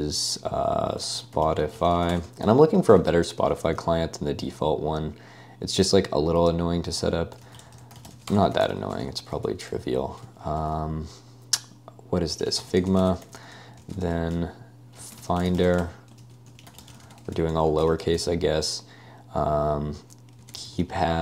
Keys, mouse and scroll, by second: 0.0-3.5 typing, 7.2-9.5 typing, 12.2-18.4 typing, 20.4-21.2 typing.